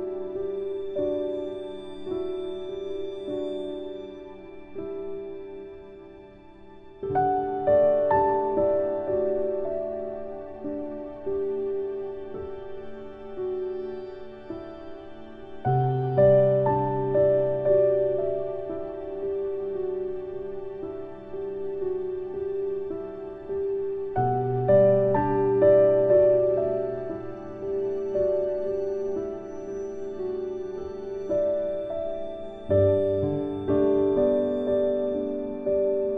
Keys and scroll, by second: 14.9 F9, 17.4 ctrl+z, 25.8 ctrl+z, 26.5 ctrl+z, 27.0 ctrl+z, 31.1 ctrl+z, 31.8 ctrl+z, 33.4 ctrl+z, 34.8 shift+f.